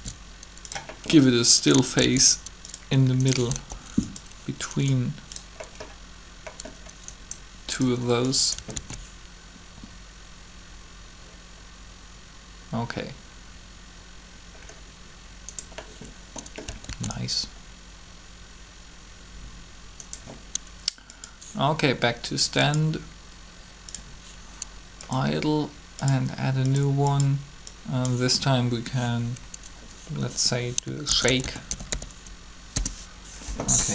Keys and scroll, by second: 2.0 shift+d, 3.5 shift+g, 8.7 alt+a, 16.9 alt+a, 30.8-32.0 typing, 32.5 Return.